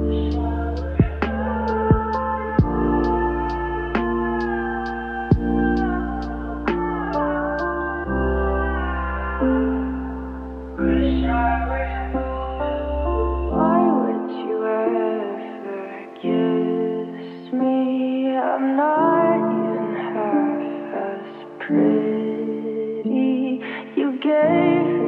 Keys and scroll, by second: 0.2-1.3 typing.